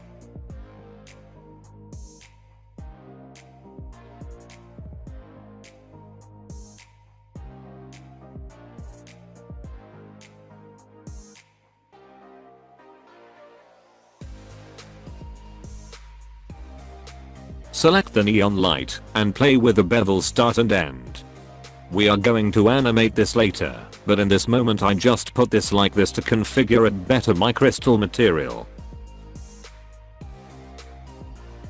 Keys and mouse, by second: 0.6 alt+a, 0.9-2.1 middle drag, 2.7 middle click, 3.7 alt+middle click, 3.9 alt+middle click, 4.4-4.8 middle drag, 5.1 click, 10.4 h, 12.7 alt+h, 13.9 h, 14.5 alt+h, 15.2 h, 15.5 click, 20.5 click, 21.6-24.2 drag, 25.0 alt+h, 25.3 alt+a, 26.1 middle click, 27.1 middle click, 27.5 click, 28.0 middle click, 28.8 middle click, 31.5 click.